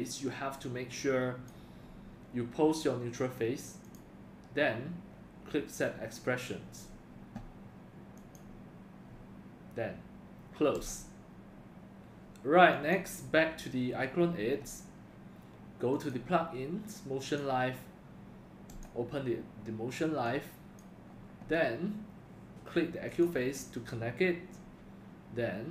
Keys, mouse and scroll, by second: 0.1-0.7 drag, 0.9 drag, 3.8 click, 8.2 click, 9.1 drag, 10.7 click, 15.9 click, 17.3 click.